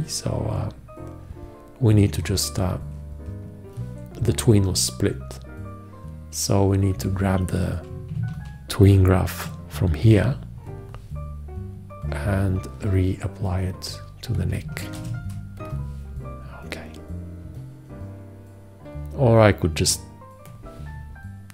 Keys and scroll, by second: 10.3 ctrl+c, 15.2 ctrl+v.